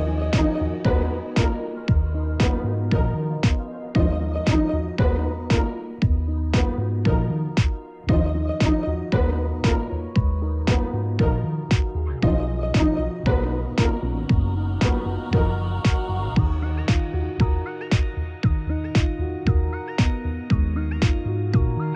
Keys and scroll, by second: 12.4 ctrl+t.